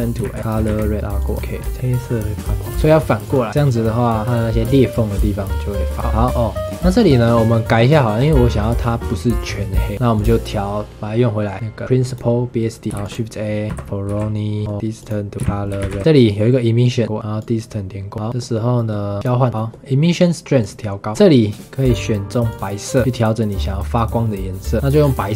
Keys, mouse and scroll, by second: 0.2 shift+a, 1.2 click, 1.3-1.8 scroll up 5, 3.2 click, 6.0 scroll down 5, 6.2 middle click, 6.6-8.2 drag, 8.2 scroll down 1, 8.3-9.4 scroll up 7, 9.4-9.9 scroll down 3, 10.1-12.1 drag, 12.8 scroll up 2, 12.9 shift+a, 14.6 middle click, 14.7 click, 15.4 shift+a, 16.0-17.0 middle drag, 17.0 click, 18.1-19.1 middle drag, 19.1 click, 19.5-20.6 middle drag, 20.6 click, 21.1-21.8 scroll up 8, 21.8 click, 22.5 click, 22.9 click, 23.0-24.8 drag, 25.0 scroll down 3.